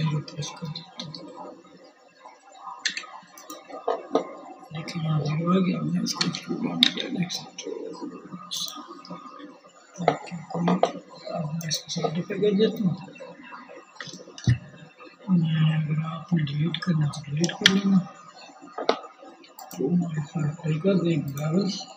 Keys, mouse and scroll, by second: 3.0-4.7 middle drag, 4.7 e, 8.1-10.0 middle drag, 10.0 click, 10.1-18.2 middle drag, 16.1 Tab, 18.2-21.9 drag.